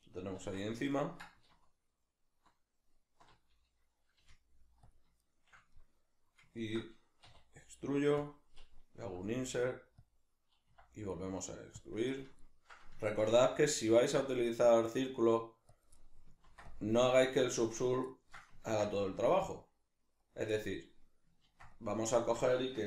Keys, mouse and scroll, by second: 0.4 alt+o, 0.9-4.9 ctrl+middle drag, 1.5 alt+o, 4.9 click, 5.2-8.3 shift+middle drag, 7.3 e, 8.3 click, 9.1 i, 10.1 click, 10.7 e, 11.9 click, 12.1-15.8 middle drag, 13.3 ctrl+r, 15.8 click, 15.9-17.8 middle drag, 16.4 ctrl+r, 17.8 click, 18.1-20.3 ctrl+middle drag, 18.7 ctrl+r, 20.3 click, 20.5-22.3 middle drag, 21.5 ctrl+r, 22.3 right click.